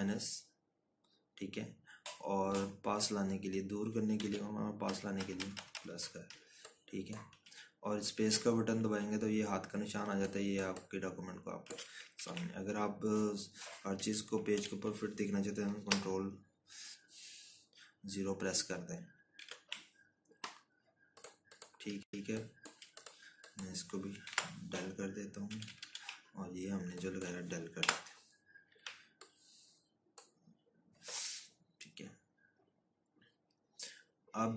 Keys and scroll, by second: 0.0 -, 0.6 ctrl+-, 6.0 ctrl+-, 8.7-9.6 scroll, 10.2-11.0 scroll, 14.0 ctrl+-, 16.4 ctrl+-, 17.7 ctrl+0, 21.3 ctrl+-, 24.3 scroll, 25.9 Delete, 27.1 ctrl+-, 27.3 ctrl+-, 27.5 ctrl+-, 29.5 Delete, 30.3 z.